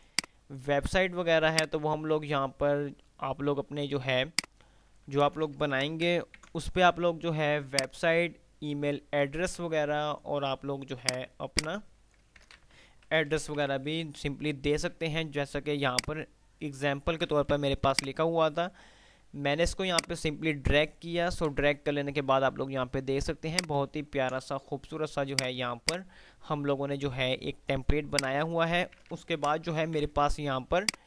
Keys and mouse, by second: 5.4 ctrl+g, 5.9 Delete, 6.4 ctrl+z, 7.9-8.6 drag, 12.6 ctrl+g, 13.1 Delete, 13.9 ctrl+z, 13.9 F3, 16.1-18.1 drag, 17.7 F2, 19.9 click, 21.2 Right, 23.7 ctrl+click, 25.4 click, 26.4 F3, 28.2 click, 29.2 ctrl+g, 29.6 Delete, 30.4 ctrl+z.